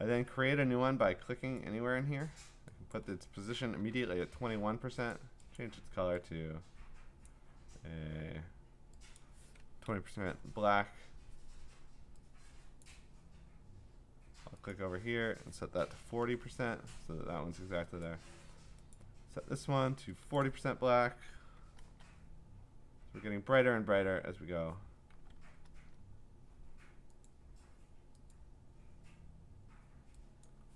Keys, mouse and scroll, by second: 1.6 click, 2.0 typing, 2.9 click, 3.5-4.5 typing, 5.1 click, 5.6 click, 7.2 click, 9.2 click, 10.0-10.9 typing, 12.8 click, 14.7 click, 15.9-16.7 typing, 18.0 click, 19.0 click, 20.4 click, 20.7-21.6 typing, 21.8 Return, 22.9-25.8 typing, 27.3 click, 28.3 click, 30.4 click.